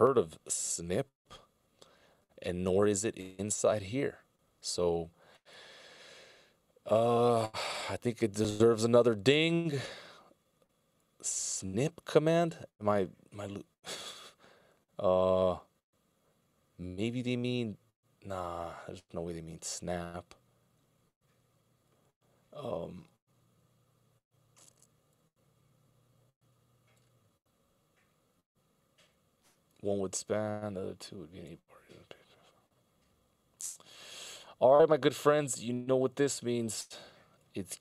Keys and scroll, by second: 0.9 s.